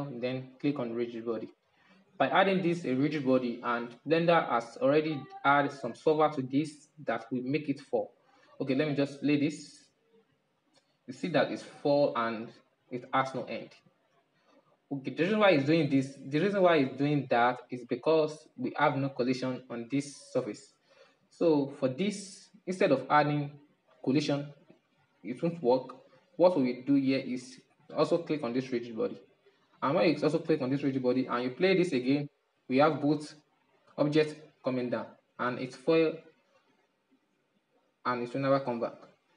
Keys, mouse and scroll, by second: 0.2-2.3 drag, 2.3-5.3 middle drag, 6.1-9.1 middle drag, 9.1 click, 11.4 middle click, 11.6 scroll down 1, 11.7-14.5 middle drag, 19.3 right click, 20.8-24.5 drag, 25.7-28.4 middle drag, 28.4-33.3 drag, 33.3-35.1 middle drag, 35.1-35.6 drag, 35.6-38.7 middle drag, 39.1-39.3 drag.